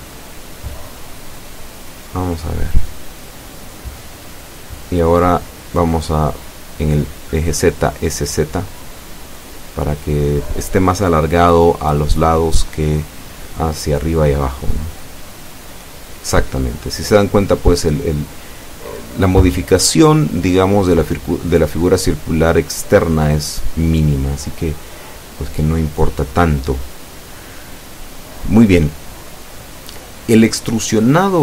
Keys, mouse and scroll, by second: 2.6 scroll down 2, 4.3 scroll up 2, 5.2 scroll down 2, 6.1 scroll up 2, 8.2 scroll down 2, 12.0 click, 13.2 right click, 14.3 shift+right click, 15.3 shift+s, 15.6 shift+z, 21.0 click, 21.6 scroll down 2, 22.9 middle click, 23.7 Tab, 24.1 click, 24.4 middle click, 24.4-25.9 drag, 26.2 scroll up 2, 28.4 Tab, 30.8 o.